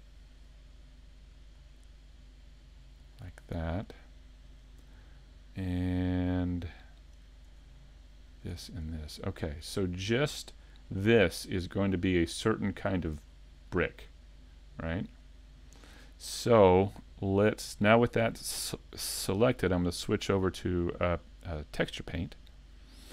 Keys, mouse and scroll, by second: 3.5 right click, 3.7 middle click, 5.1-5.4 scroll down 2, 5.4 middle click, 7.6-8.1 scroll up 3, 8.4 shift+right click, 9.5 middle click, 9.5 scroll down 3, 12.1 scroll up 1, 13.7 middle click, 13.7 scroll up 1, 16.2 scroll down 1, 16.6 shift+middle click, 17.4 middle click, 19.7 click.